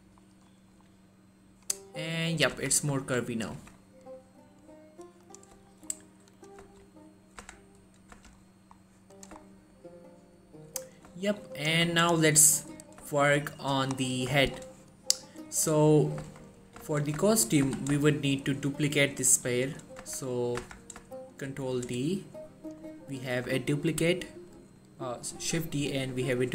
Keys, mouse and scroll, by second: 2.5 click, 2.6 z, 3.1 1, 3.7 Tab, 3.9-4.3 scroll down 1, 5.4 click, 5.8 shift+middle click, 6.0-6.5 scroll up 1, 6.5 click, 6.8-7.5 shift+scroll up 2, 6.8 shift+middle click, 7.5 Tab, 8.5-8.9 scroll down 1, 9.3 click, 9.6 shift+middle click, 10.9 scroll up 1, 11.4 shift+middle click, 11.7 click, 12.1 shift+middle click, 12.2-12.8 shift+scroll up 1, 12.8 scroll down 1, 13.2 shift+middle click, 14.1-14.4 scroll up 1, 14.5 shift+middle click, 16.4 Tab, 16.9 z, 17.3 shift+scroll up 1, 17.4 shift+middle click, 17.8 z, 18.1 Tab, 19.4 g, 19.8 right click, 20.1 Tab, 21.6 shift+d, 22.8 right click.